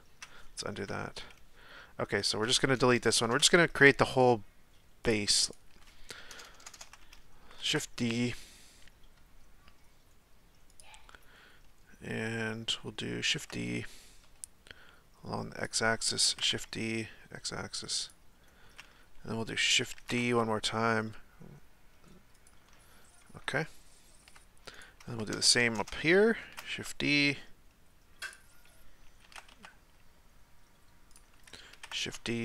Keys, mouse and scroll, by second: 0.7 KP_1, 2.2 right click, 2.8-3.2 ctrl+KP_Add, 3.6 x, 5.4 right click, 6.3-6.7 ctrl+KP_Add, 7.6 shift+d, 11.4-13.3 scroll up 1, 13.3 shift+d, 16.3 shift+d, 20.0 shift+d, 23.6-24.7 shift+middle drag, 24.7 right click, 25.3-25.8 ctrl+KP_Add, 26.4 shift+d, 29.2 shift+d.